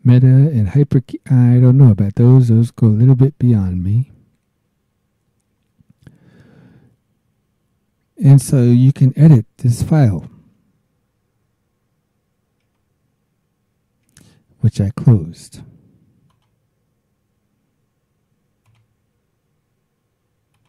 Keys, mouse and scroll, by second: 12.6 alt+Tab, 16.3 click, 18.6 click, 20.5 click.